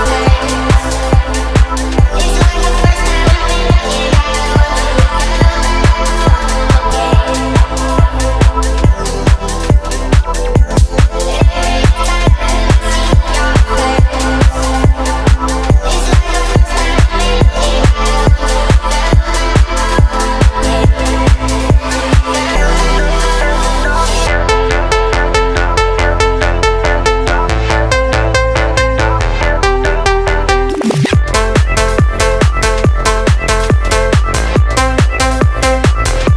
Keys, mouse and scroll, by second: 0.6 click, 2.8 click, 15.4 click, 16.4 click, 17.4 click, 27.2 click, 29.2-30.0 drag.